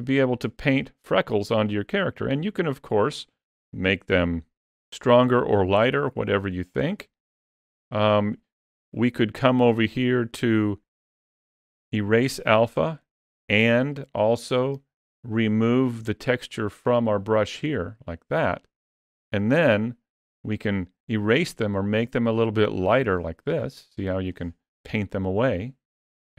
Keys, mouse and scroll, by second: 0.2 middle click, 6.2 ctrl+middle click, 9.8 click, 15.3 click, 20.0 ctrl+middle click, 21.7 click, 22.9 click, 23.3 click, 23.7 click, 24.1 click.